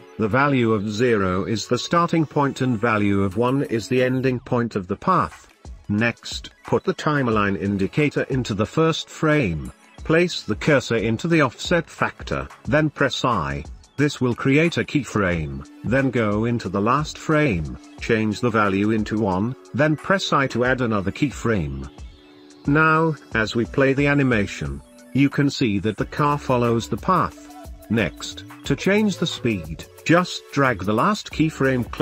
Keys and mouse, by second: 0.6-2.4 middle drag, 2.7 ctrl+s, 3.1-3.6 middle drag, 6.4-10.3 drag, 14.0 i, 19.9 click, 21.7 i, 23.1-23.5 drag, 23.5 space, 25.0-25.5 middle drag, 29.1 space, 30.8 drag, 31.1-31.7 middle drag, 31.1 a.